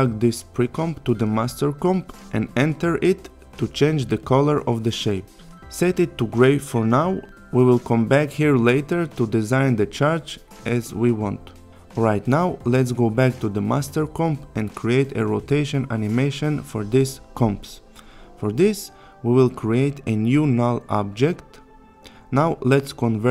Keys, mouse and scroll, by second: 3.3 click, 9.1-10.1 click, 13.8 click, 16.5 click, 17.5 right click, 20.6 click, 23.2 shift+click.